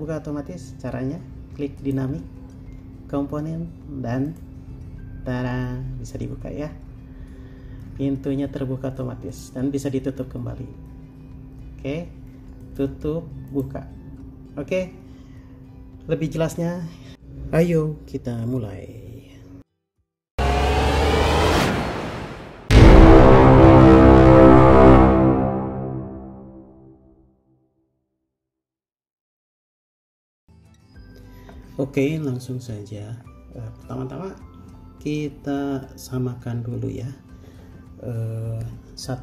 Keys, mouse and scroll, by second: 4.9 middle click.